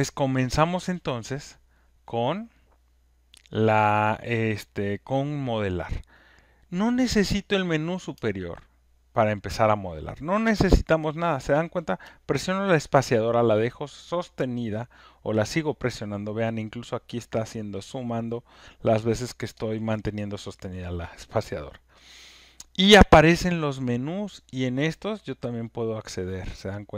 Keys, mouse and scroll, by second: 8.2 space, 10.4 space, 11.0-11.6 space, 12.0-14.8 space, 24.6-26.9 typing, 24.7 click, 25.9 click.